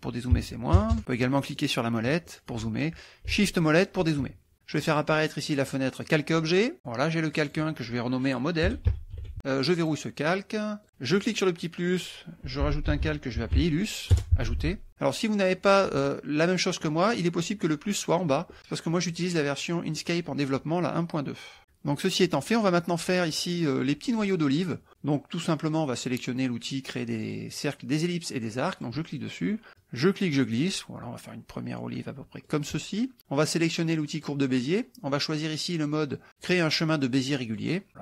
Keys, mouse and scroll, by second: 0.4 KP_Subtract, 0.8 KP_Add, 1.5 middle click, 2.3 click, 3.5 shift+click, 4.9 click, 6.0 click, 7.3 click, 8.7 m, 9.2 d, 9.8 click, 10.8 click, 11.3 click, 12.4-13.9 typing, 14.2 Return, 19.2 click, 20.2 click, 22.2 middle click, 22.7 middle click, 28.8 click, 29.2 middle click, 29.8-32.7 drag, 34.2 click, 37.5 click.